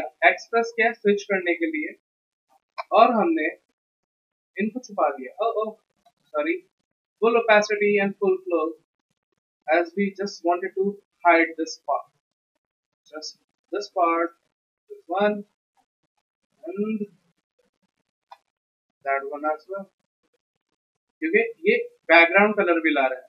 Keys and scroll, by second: 1.1 x, 1.3 x, 1.6 x, 2.1 x, 6.1 ctrl+z.